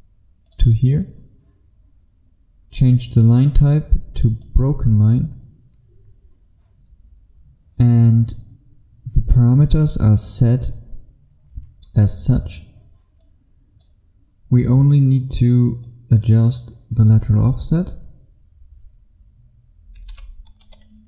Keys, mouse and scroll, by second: 0.6 click, 6.1-13.3 scroll down 1, 13.3 click, 20.7 KP_6.